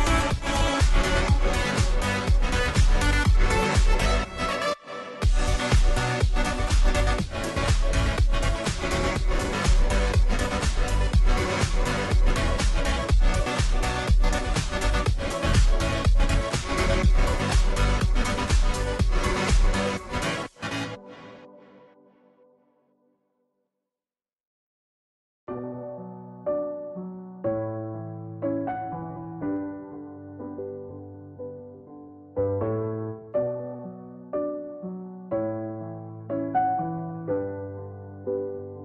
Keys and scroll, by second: 21.8 ctrl+j, 29.2-29.6 Up, 29.6 Left, 30.1 Left, 32.6 Down, 33.5-34.3 Down, 35.2-36.2 Left, 36.2 Down, 36.6 Down.